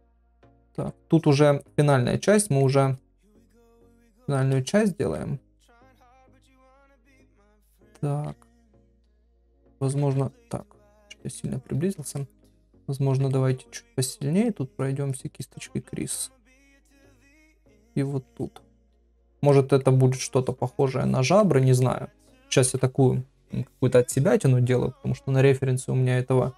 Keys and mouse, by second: 0.0 shift+click, 0.2 shift+click, 0.5 middle click, 1.2 shift+click, 2.4 middle click, 3.0 shift+click, 3.1 shift+click, 3.6 middle click, 4.0 shift+middle click, 4.7 shift+click, 4.8 shift+click, 5.2 middle click, 5.8 ctrl+middle click, 6.1 middle click, 7.5 middle click, 8.4 shift+middle click, 8.7 middle click, 9.5 ctrl+middle click, 10.2-11.5 ctrl+middle drag, 11.6 ctrl+middle click, 12.2 shift+middle click, 13.3 ctrl+middle click, 14.3 click, 14.7 click, 15.1 click, 15.4 middle click, 16.6-16.9 [, 16.9 middle click, 17.7 click, 18.0 click, 18.3 click, 18.6 click, 19.5 middle click, 20.4 click, 20.7 click, 21.0 click, 21.4 ctrl+middle click, 21.8 middle click.